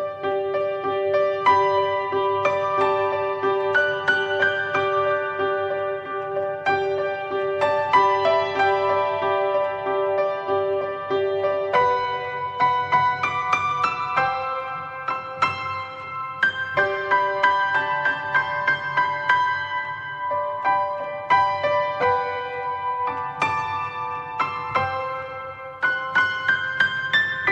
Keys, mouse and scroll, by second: 2.5 click, 2.8-9.8 middle drag, 9.8-16.9 drag, 17.9-20.9 drag, 20.9-21.8 scroll down 2, 21.8 scroll down 1, 24.6-25.3 scroll up 10, 25.3 scroll down 2, 25.6-27.4 middle drag, 27.4 click.